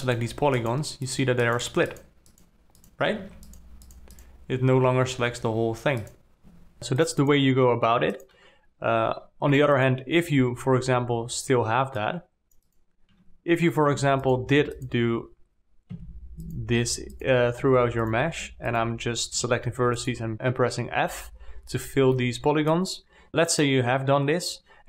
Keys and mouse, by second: 0.4 click, 1.4 click, 2.8 click, 3.6 alt+a, 4.2 click, 6.4 click, 6.8 alt+a, 7.2 alt+a, 7.4 drag, 9.6 2, 10.2 click, 10.7 x, 13.5 1, 14.4 alt+a, 14.6 click, 15.2 shift+click, 16.4 f, 18.0 f, 18.4 click, 19.8 g, 21.5 f, 22.6 alt+middle click, 23.0 alt+click.